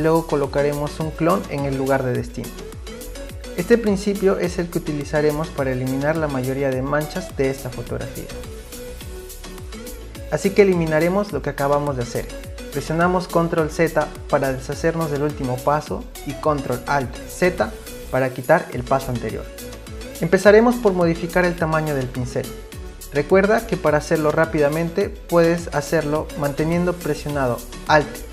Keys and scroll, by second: 14.1 ctrl+z, 15.6 ctrl+alt+z.